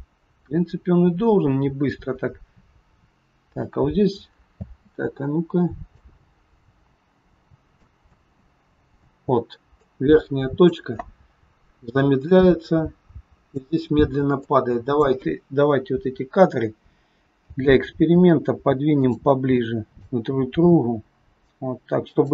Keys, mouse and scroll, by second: 4.5 space, 5.8 click, 8.0 space, 9.9 click, 9.9 space, 12.2 click, 15.3 click, 15.3-15.9 scroll up 4, 17.5 g, 19.5 click, 20.3 g.